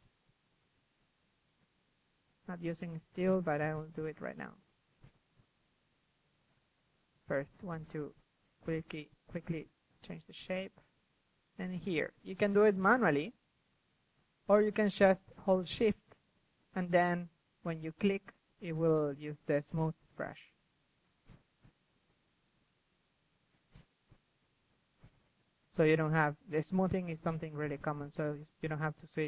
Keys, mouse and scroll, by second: 0.3 ctrl+KP_1, 1.7 drag, 1.9-2.5 middle drag, 2.5 KP_3, 2.9 click, 3.0 middle click, 3.5-7.4 drag, 7.4-7.7 middle drag, 7.7-11.8 drag, 11.8 z, 12.0-13.8 drag, 12.1 z, 13.8 middle click, 16.8-17.3 drag, 17.3 middle click, 17.5 ctrl+z, 18.3 ctrl+z, 18.5 f, 19.7-20.8 drag, 20.8 middle drag, 21.0 KP_3, 21.5-23.3 drag, 23.3 middle click, 23.5 KP_3, 24.3 middle click, 24.5-26.6 drag, 24.5 KP_3, 26.6 KP_3, 28.0-29.2 drag.